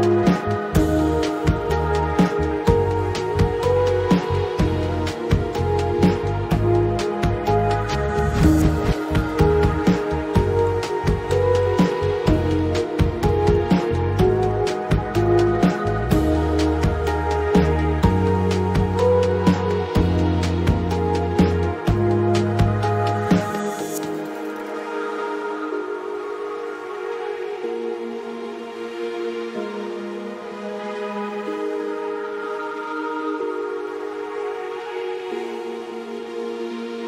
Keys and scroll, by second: 5.8-6.8 typing, 26.2 5, 26.5 Return.